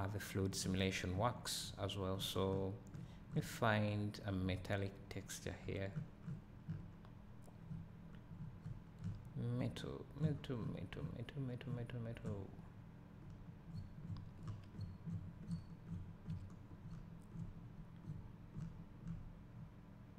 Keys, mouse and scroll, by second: 7.9 middle click, 7.9-8.7 scroll down 2.